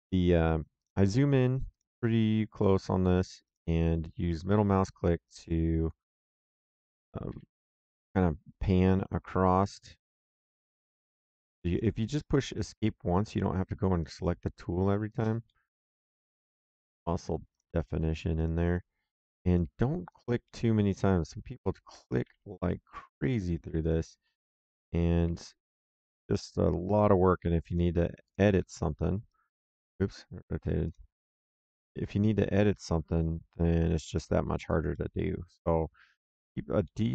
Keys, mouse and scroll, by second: 4.6 click, 7.2 Escape, 8.1 middle click, 11.6 click, 13.2 click, 15.0 click, 15.4 middle click, 16.2 Escape, 17.4 click, 19.4 click, 20.4 middle click, 21.8 click, 22.2 Escape, 23.1 click, 24.9 click, 25.2 Escape, 26.2 click, 28.2 right click, 30.8 click, 31.5 middle click, 33.9 click, 34.9 middle click, 36.2 click, 36.8 middle click.